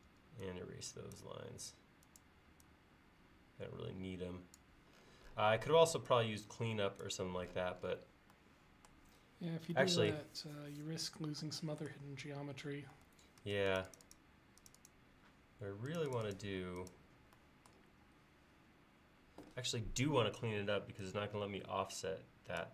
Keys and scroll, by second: 0.1 e, 13.5 space.